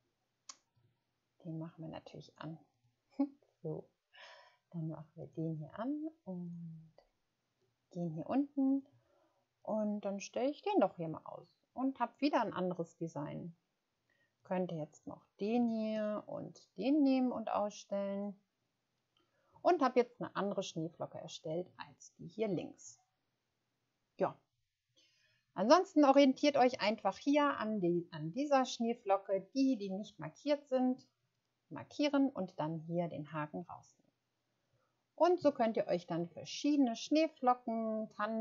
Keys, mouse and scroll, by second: 2.7 click, 3.9-4.2 scroll down 1, 7.8-8.3 scroll down 1, 35.9 ctrl+scroll down 1.